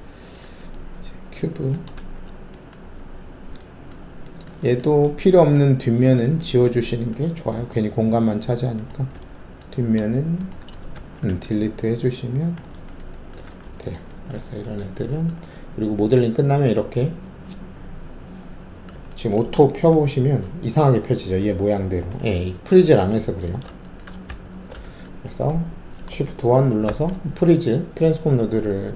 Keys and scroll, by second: 1.9 alt+shift+a, 7.5 alt+3, 10.9 ctrl+alt+shift+`, 13.4 alt+w, 14.3 alt+`, 19.8 ctrl+alt+shift+a, 23.2 ctrl+alt+z, 24.2 ctrl+z, 26.8 alt+shift+1.